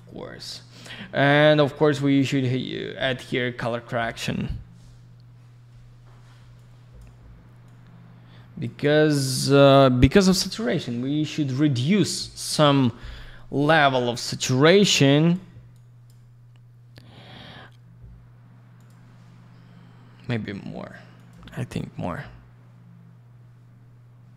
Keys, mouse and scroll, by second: 6.5 click, 7.6 click, 14.9 click, 15.7 click, 18.8 click, 21.2 click.